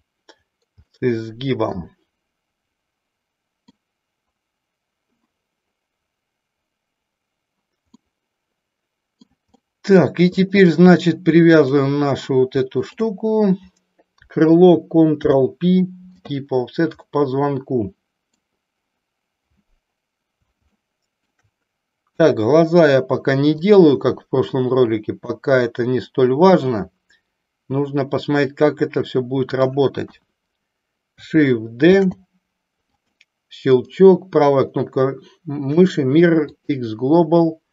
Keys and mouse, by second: 1.0-4.0 middle drag, 8.0-9.2 middle drag, 9.6 middle click, 11.6 click, 12.7 shift+click, 15.5 ctrl+p, 17.0-18.6 middle drag, 20.8 shift+middle click, 22.1 KP_1, 23.6-25.3 drag, 26.6-29.8 middle drag, 30.1 KP_1, 32.0 shift+d, 32.8 click, 33.7-36.7 right drag.